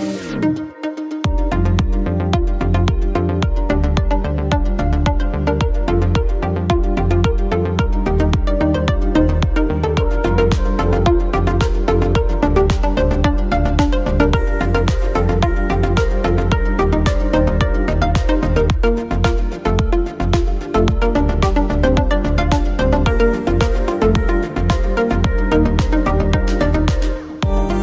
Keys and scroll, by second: 4.9-6.5 typing, 10.4 shift+space, 13.4 space.